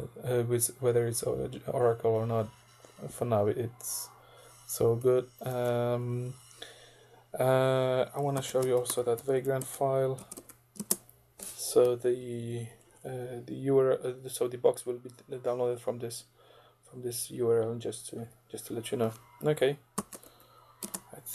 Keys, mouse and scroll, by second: 5.5 ctrl+d, 8.0-10.3 typing, 10.4 Tab, 10.8 Return, 11.9 Down, 12.5 Down, 13.1 Right, 18.2 Down, 20.0 shift+ö, 20.3 shift+q, 20.8 shift+Return.